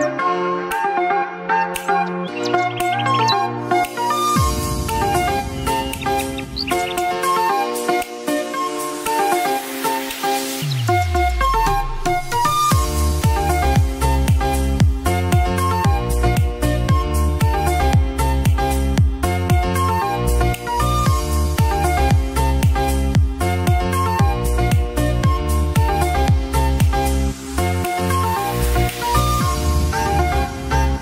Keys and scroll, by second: 7.0 ctrl+z, 14.8 ctrl+s, 18.2 [, 22.9 ctrl+z, 23.2 ctrl+s, 24.4 space, 25.7 [.